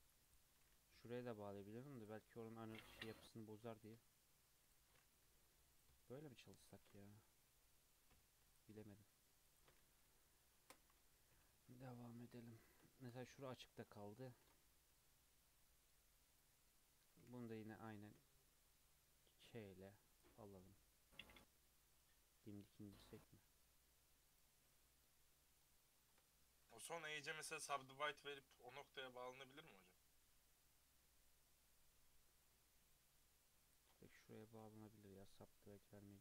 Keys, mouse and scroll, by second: 0.2 shift+click, 1.0 j, 2.0 click, 2.8 shift+click, 3.7 click, 4.6 shift+click, 5.7 click, 6.6 shift+click, 8.1 j, 8.5 click, 9.5 shift+click, 10.0 h, 10.5 ctrl+z, 11.3 j, 12.0-12.6 scroll up 2, 12.6-13.1 shift+middle drag, 13.1 click, 14.4 ctrl+r, 18.0 k, 24.8-27.3 shift+middle drag, 27.3 k, 35.7 Tab.